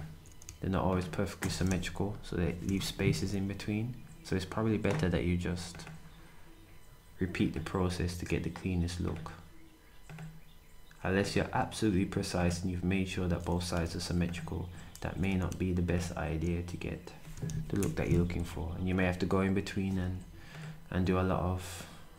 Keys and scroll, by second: 2.6 ctrl+shift+8, 12.9 d, 14.9 d, 17.8 8, 18.3 d.